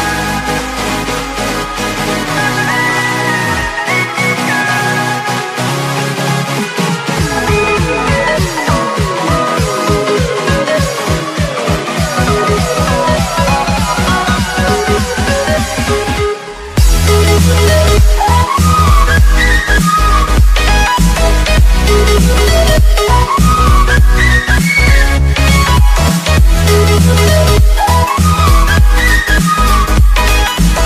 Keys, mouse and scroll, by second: 0.4-1.1 alt+scroll down 3, 1.5-1.9 alt+scroll up 2, 2.3 alt+scroll down 1, 2.5-3.7 scroll up 3, 3.7 click, 6.5 Tab, 7.1 click, 8.1 click, 11.4 middle click, 11.7 click, 13.3 alt+Tab, 13.7 click, 14.9 click, 16.6 alt+Tab, 17.1 click, 17.7 t, 18.8 space, 19.0 i, 20.3 click, 21.5-22.0 scroll up 1, 22.0 click, 22.5 Tab, 23.0 click, 23.7 click, 23.8 Tab, 24.2 right click, 24.6 click, 24.6 Tab, 25.1 click, 26.6 click, 27.8 Return, 28.0 click, 29.3 click, 30.3 Return, 30.7 click.